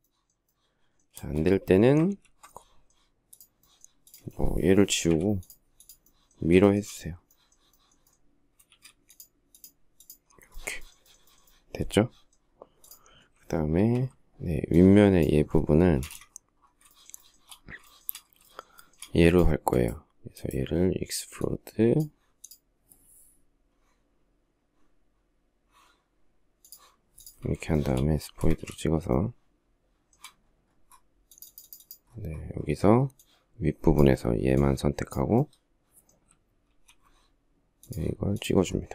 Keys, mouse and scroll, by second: 0.9 space, 1.8 ctrl+z, 4.9 Delete, 6.4 shift+middle click, 8.5 shift+x, 13.5 alt+t, 15.8 space, 16.0 Escape, 16.7 shift+middle click, 17.8 shift+double middle click, 18.3 shift+double middle click, 18.4 shift+double middle click, 18.5 shift+double middle click, 27.5 shift+middle click, 28.2 space, 28.2 Escape, 28.9 shift+middle click, 36.4 alt+t, 38.8 shift+middle click.